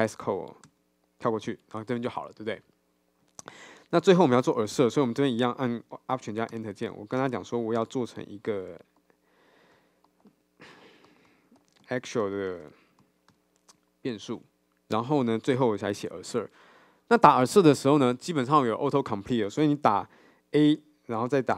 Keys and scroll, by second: 6.5 alt+Return.